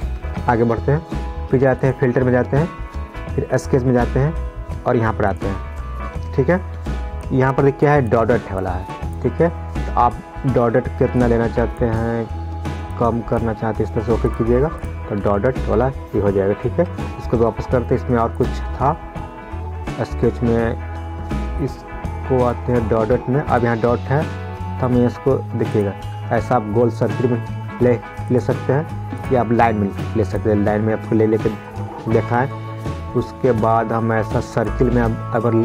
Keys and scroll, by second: 0.6 ctrl+z, 17.1 ctrl+z, 32.5 ctrl+z.